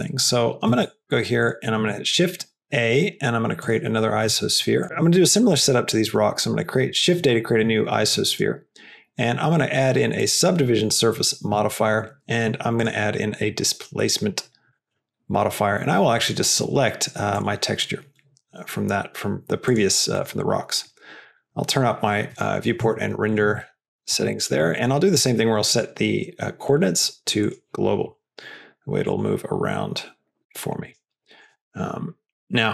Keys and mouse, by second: 1.7 shift+a, 4.2 g, 8.2-10.3 drag, 12.7-14.8 drag, 16.2-17.5 drag, 22.7 s, 23.3 g, 24.0 s, 24.5 g, 25.7 drag, 26.7-27.5 drag, 28.0 g, 30.8 click, 31.5 g.